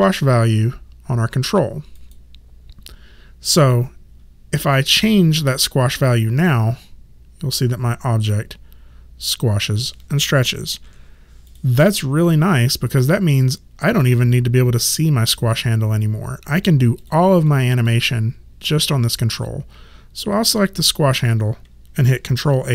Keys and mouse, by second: 2.0 click, 6.5 middle click, 10.7 ctrl+z, 11.5 click, 14.1 click, 17.0 click, 20.6 click.